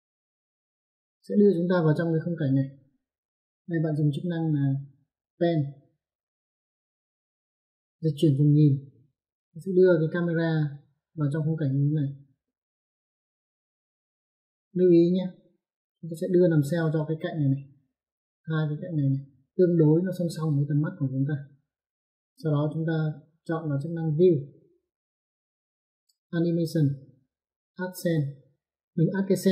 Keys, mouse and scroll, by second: 7.3 click, 9.2 click, 11.4 click, 12.7 middle click, 15.7 click, 16.5 middle click, 21.7 click.